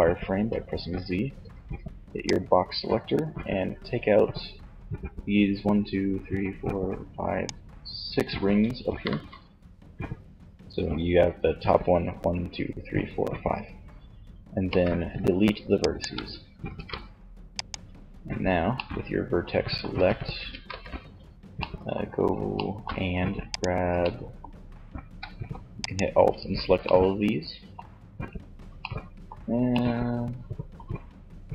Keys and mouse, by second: 0.5 b, 13.8 x, 15.9 ctrl+Tab, 18.8 Tab, 19.5 Tab, 19.6 z, 22.7 middle click.